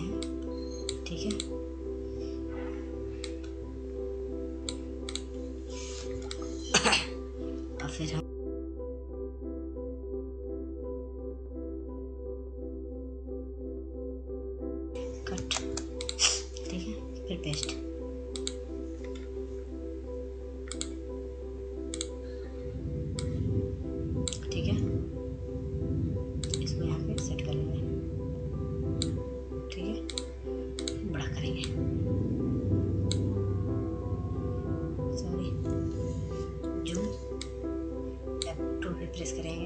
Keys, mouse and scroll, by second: 1.7-6.6 drag, 6.6 scroll down 1, 7.2 scroll up 1, 8.1 click, 8.4 scroll up 1, 8.8-13.8 drag, 13.8 ctrl+space, 14.2 click, 19.1 click, 23.0 scroll up 1, 24.9 click, 25.6-33.6 drag, 33.6 scroll down 1, 35.9-39.6 drag.